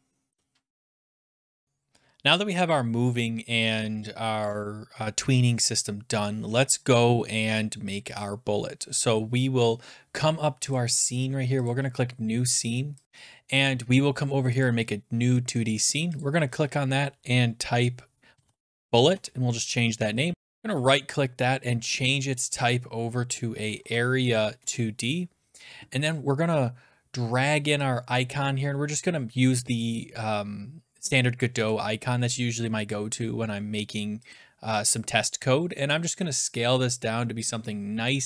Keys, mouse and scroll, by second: 0.8 click, 14.7 click, 16.2 click, 18.1-19.2 typing, 20.1 click, 20.6 right click, 22.1 click, 23.4-24.3 typing, 24.6 Return, 29.8 click, 31.7 click, 34.3 click, 38.0 click.